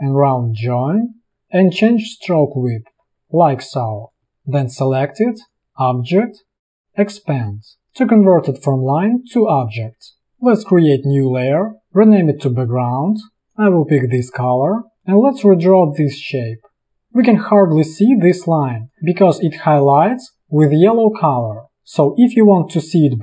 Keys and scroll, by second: 4.3 space, 13.3 i, 18.5 space.